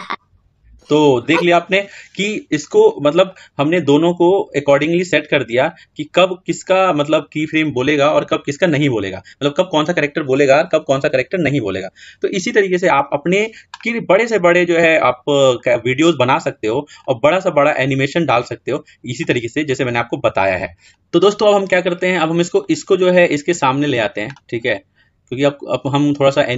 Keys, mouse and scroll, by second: 1.3-13.8 drag, 13.8-14.5 scroll down 4, 14.5-16.0 scroll up 1, 16.0-16.9 scroll up 5, 16.9-18.4 middle drag, 18.4-19.1 scroll down 4, 19.1-20.8 middle drag, 20.8-21.1 scroll down 2, 21.1-21.7 scroll up 7, 22.5 click, 24.4-24.8 scroll down 4, 24.8-26.5 scroll up 1.